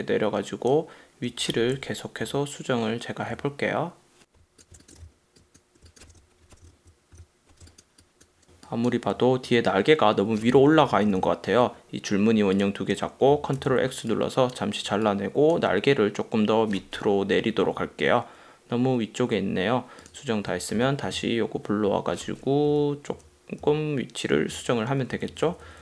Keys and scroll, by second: 2.3 Down, 3.4 Up, 4.7 space, 5.0 v, 5.8 space, 6.3 super+-, 6.7 super+-, 7.1 super+=, 7.6 space, 8.6 super+space, 11.1 super+-, 13.7 super+x, 17.5 Down, 20.8 super+f, 22.8 Up, 23.7 Down, 24.6 shift+Down, 25.2 Up.